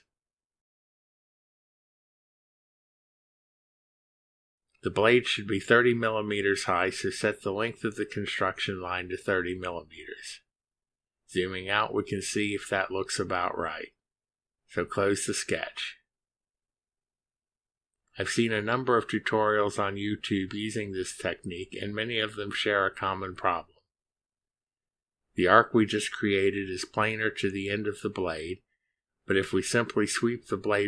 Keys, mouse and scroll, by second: 1.3 click, 3.7 click, 6.1 click, 8.3 click, 11.0 3, 11.4 0, 12.7 Return, 18.3 click, 23.0-24.5 scroll down 6.